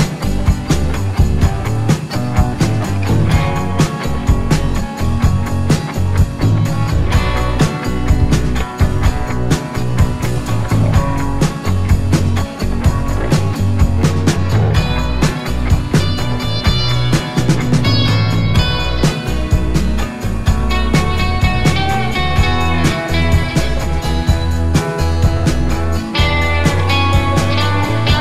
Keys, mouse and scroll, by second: 1.1 t, 1.6 click, 4.9 Delete, 6.2 t, 6.7 click, 9.3-11.6 scroll up 1, 12.9 click, 14.1 Down, 15.6 Up, 16.7 t, 17.2 click, 25.0 click, 26.0 click, 27.1 Down, 27.8 Right.